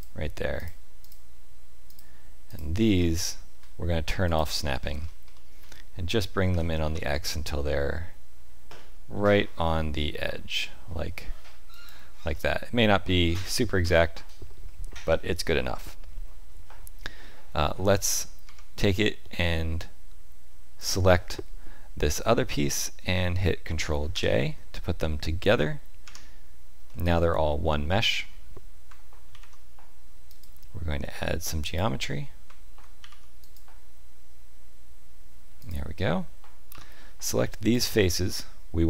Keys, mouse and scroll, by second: 0.5 click, 1.0 shift+click, 1.8 shift+click, 2.9 click, 3.2 shift+middle click, 4.2 click, 4.8-5.1 scroll up 2, 5.3 shift+middle click, 6.5 g, 12.3 middle click, 18.4 Tab, 20.7 shift+click, 24.1 ctrl+j, 26.0 Tab, 26.8 middle click, 29.3 ctrl+r, 33.0 ctrl+r, 36.7 3, 37.2 click, 37.7 shift+click.